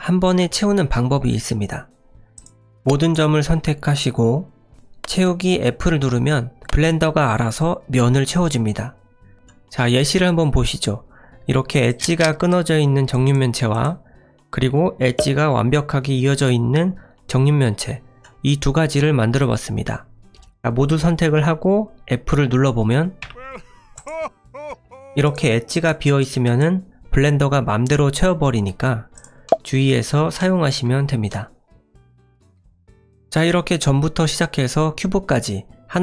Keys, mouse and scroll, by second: 2.3 click, 2.6 click, 2.6 middle click, 11.9 click, 12.5 click, 13.7 click, 20.3 click, 21.3 a, 23.2 f, 23.9 click, 25.2 click, 26.0 click, 26.9 click, 29.1 click, 29.4 middle click, 30.5 shift+middle click, 31.3 middle click.